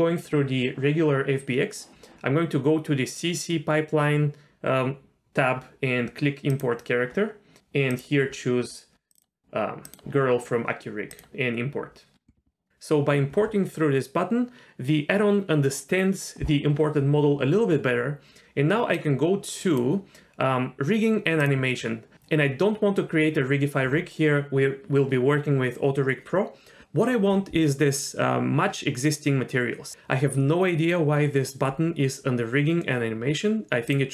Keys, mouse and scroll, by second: 6.5 click, 18.9-19.8 drag, 21.4 click, 33.9 click.